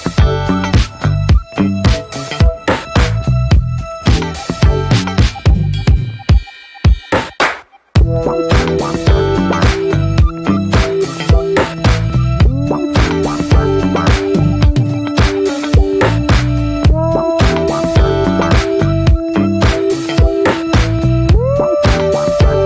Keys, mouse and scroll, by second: 0.0 alt+middle click, 0.9 click, 1.0-2.1 scroll up 3, 1.3 shift+middle click, 2.1 shift+middle click, 2.3-4.2 scroll down 1, 4.5-5.2 scroll down 2, 4.7 middle click, 5.2 shift+middle click, 6.5 shift+middle click, 6.6-7.8 scroll up 3, 7.8-8.4 scroll up 1, 8.5 scroll down 2, 8.8 middle click, 9.5 scroll up 2, 9.7-11.2 shift+middle drag, 11.2-14.3 drag, 14.7 shift+middle click, 14.8-15.1 scroll up 1, 15.1 ctrl+z, 17.3 click, 17.5 scroll down 2, 18.0 shift+middle click, 18.0 scroll up 1, 18.3-19.6 shift+middle drag, 19.6 click, 19.8 scroll down 1, 20.1 scroll up 1, 20.3-22.6 shift+middle drag.